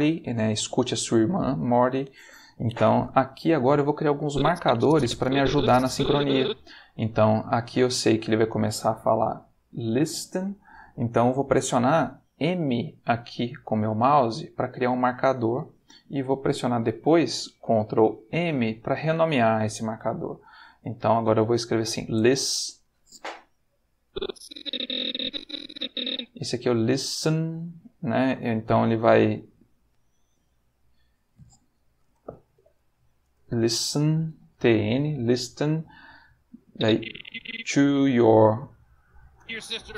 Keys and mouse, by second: 4.3-6.5 drag, 14.1 m, 18.2 ctrl+m, 20.5-21.7 typing, 22.1 Return, 24.0-26.2 drag, 29.4 m, 32.0 ctrl+m, 32.5 ctrl+t, 32.6 ctrl+n, 33.2 Return, 36.7 click.